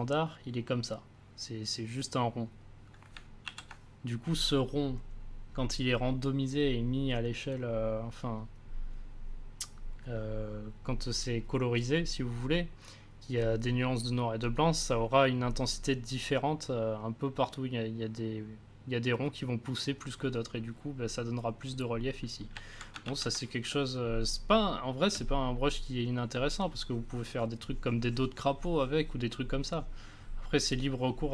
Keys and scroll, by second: 3.4 ctrl+z, 23.0 ctrl+z, 23.6 space.